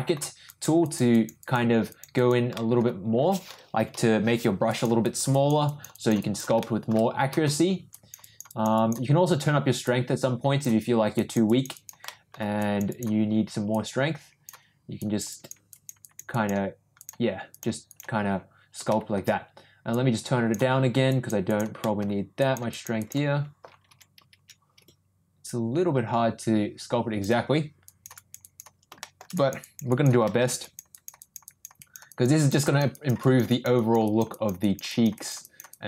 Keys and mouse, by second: 0.4 click, 0.8 click, 1.1 click, 1.4 click, 1.9 click, 2.2 click, 2.5 middle click, 3.8 [, 3.9 [, 4.7 click, 5.0 click, 5.3 click, 5.6 click, 5.9 click, 6.2 click, 6.6 middle click, 7.9 click, 8.2 click, 8.5 click, 8.7 click, 9.8 click, 11.1 click, 11.4 click, 11.7 click, 12.0 middle click, 12.6 click, 12.9 click, 13.8 click, 14.9 click, 15.3 click, 15.7 click, 16.0 click, 16.3 click, 17.0 click, 17.5 click, 17.9 click, 18.9 shift+middle click, 19.9 click, 21.1 click, 21.4 click, 21.8 middle click, 22.4 click, 22.7 click, 23.0 click, 25.5-27.3 ctrl+drag, 27.8 ctrl+click, 28.1 ctrl+click, 28.4 click, 29.0 shift+middle click, 29.3 click, 29.6 click, 29.9 click, 30.2 middle click, 30.6 click, 30.9 click, 31.2 click, 31.4 click, 31.8 click, 32.0 click, 32.3 click, 32.6 click, 32.9 click, 33.2 click, 33.5 click, 33.7 click, 34.0 click, 34.3 click, 34.6 click, 34.9 click, 35.1 click, 35.4 click, 35.7 click.